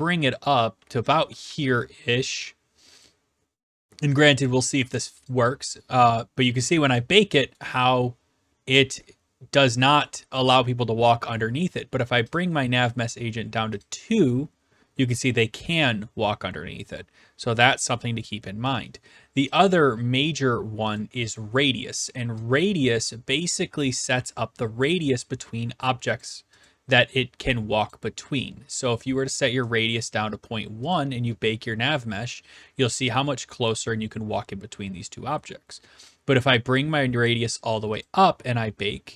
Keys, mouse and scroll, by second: 0.3 click, 0.4-1.5 typing, 1.8 right click, 3.0 click, 5.9-7.8 typing, 7.5-8.6 right drag, 10.0-11.1 right drag, 12.3-13.5 drag, 13.8-14.9 drag, 18.7 d, 18.9 right click, 19.5 click, 21.0 click, 21.4 click, 24.8 click, 26.2 click, 26.6 click, 27.9 click, 30.0 click, 30.9 click, 36.1 click, 37.2 click, 38.0 click.